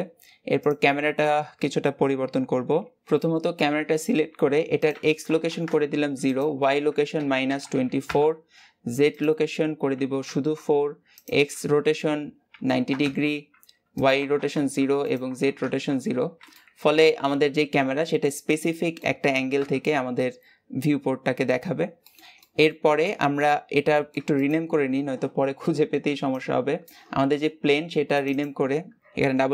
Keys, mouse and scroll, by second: 0.6 click, 5.5-16.4 drag, 16.4-19.4 middle drag, 19.4 KP_0, 21.9 middle click, 22.8-23.8 scroll down 4, 23.8 shift+middle click, 24.2 click, 28.2-29.5 drag.